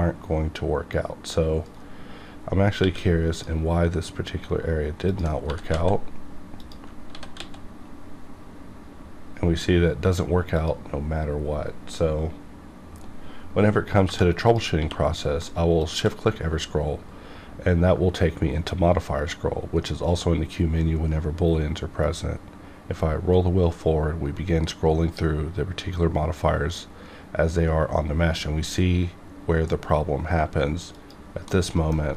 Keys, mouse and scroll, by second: 1.6 right click, 2.8 q, 3.3 click, 4.2 scroll down 1, 4.6 scroll up 1, 5.1 click, 5.5 g, 5.7 z, 6.6 click, 7.1 s, 7.4 x, 7.8 s, 10.0 right click, 10.1 right click, 10.5 click, 14.5 click, 14.8 q, 15.8 shift+click, 23.0-23.5 scroll up 2, 23.5-24.0 scroll up 1, 30.9 click, 31.5 middle click.